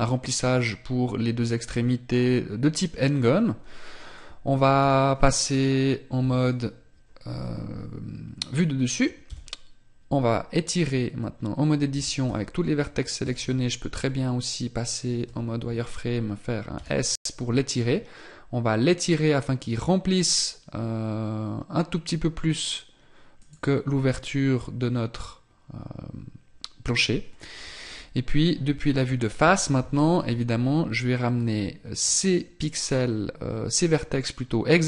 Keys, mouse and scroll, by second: 4.9 t, 6.3 KP_7, 9.4 Tab, 12.1 a, 13.3 z, 15.3 z, 28.7 KP_1.